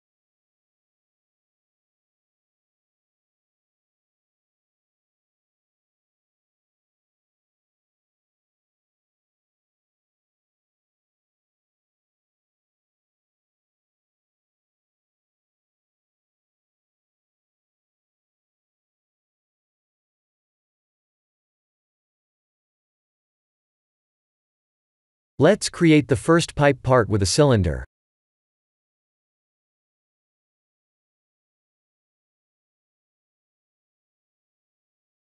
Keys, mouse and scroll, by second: 0.1-1.7 scroll up 2, 1.7 i, 3.3 s, 6.3 e, 7.5 e, 8.4 Tab, 8.9 click, 9.2 middle click, 10.9 Tab, 11.4-12.2 scroll up 2, 12.6 ctrl+r, 16.2 ctrl+r, 19.2 Tab, 19.7 middle click, 20.7-21.1 scroll down 7, 21.3 middle click, 22.4 click, 22.7 scroll down 2, 24.9 KP_1, 26.0 click, 26.3 shift+a, 30.9 r, 33.9 s.